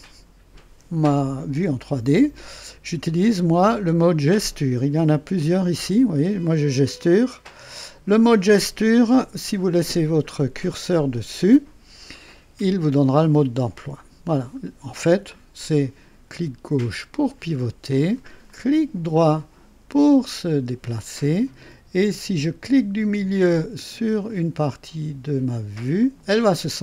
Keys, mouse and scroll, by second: 5.3 click, 7.8 click, 15.2-18.3 drag, 18.4-22.3 right drag, 26.0 middle click.